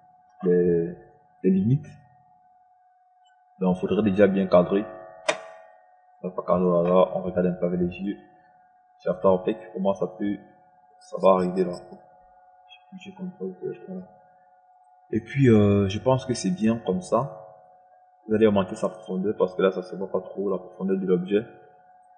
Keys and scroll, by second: 13.7 ctrl+z.